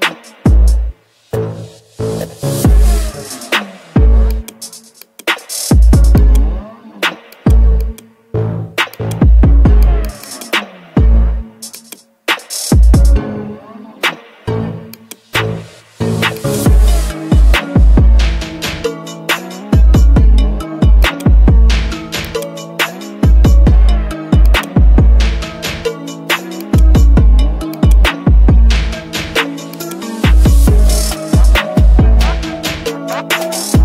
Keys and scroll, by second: 23.6 ctrl+z.